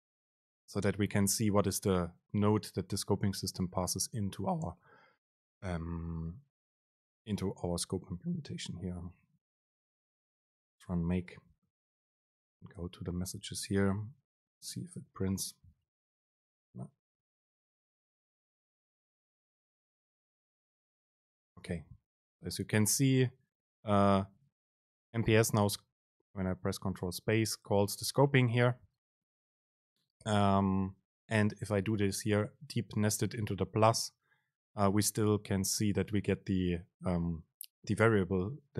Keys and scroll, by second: 21.8 super+space, 26.9 super+space, 34.1 super+space.